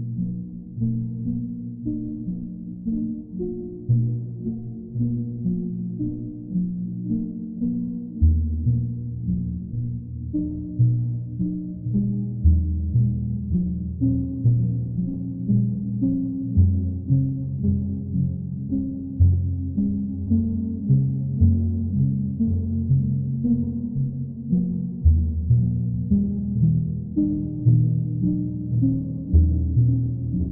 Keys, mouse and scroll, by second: 1.0 click, 1.5 click, 1.9 click, 2.4 alt+click, 2.5 alt+click, 3.7 click, 4.4 click, 5.7 shift+click, 6.2 shift+click, 6.7 click, 7.0 shift+click, 7.1 click, 7.2 alt+click, 8.3 click, 11.4 click, 12.7 shift+click, 14.6 click, 15.5 shift+click, 16.4 click, 17.8 shift+click, 18.4 click, 20.4 click, 20.8 click, 21.2 click, 21.6 shift+click, 22.3 shift+click, 22.4 alt+click, 22.9 alt+click, 24.2 alt+click, 26.2 click, 27.6 alt+click, 29.1 alt+click.